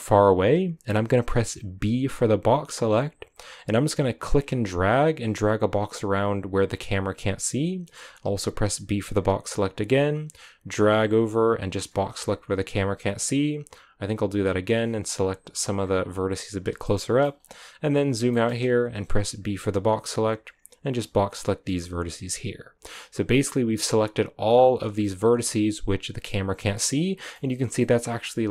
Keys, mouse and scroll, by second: 12.1-12.6 scroll up 1, 15.1 b, 15.7-16.8 scroll up 4, 16.8 shift+middle click, 17.2-18.2 scroll down 8, 18.2-21.4 shift+middle drag, 21.4 b, 22.8-24.8 scroll up 5, 24.8 scroll down 1, 24.9-26.5 shift+middle drag, 26.5 scroll down 3, 26.7 middle click, 27.5 scroll down 2, 27.7-28.5 middle drag.